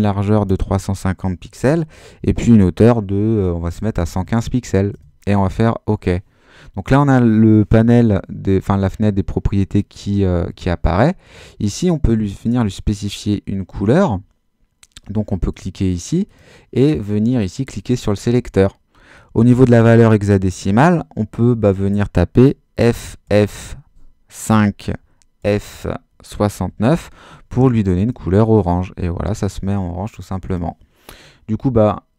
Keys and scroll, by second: 0.0-0.9 typing, 1.6 Tab, 3.7 |, 4.1 5, 4.9 Return, 22.7 f, 24.4-27.3 typing, 28.0 Return.